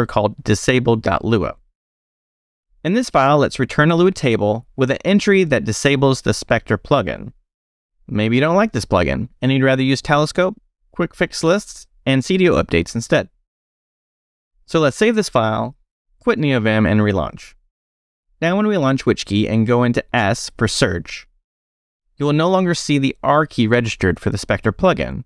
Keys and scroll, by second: 0.0-0.6 typing, 1.4 Return, 2.3 space, 2.4 e, 3.3 i, 3.9 super+v, 5.5 Escape, 19.4 space, 20.5 s.